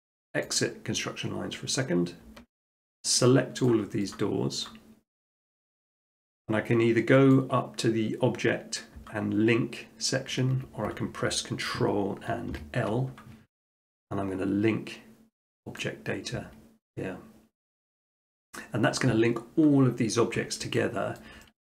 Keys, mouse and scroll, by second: 0.5 click, 0.6 click, 2.6 click, 3.3 shift+click, 3.7 shift+click, 4.2 shift+click, 4.7 shift+click, 5.3 shift+click, 5.7 shift+click, 7.4 click, 10.5 Escape, 12.5 ctrl+l, 12.8 ctrl+i, 15.8-16.9 drag, 18.6 middle click, 20.6 middle click, 21.2 shift+middle click.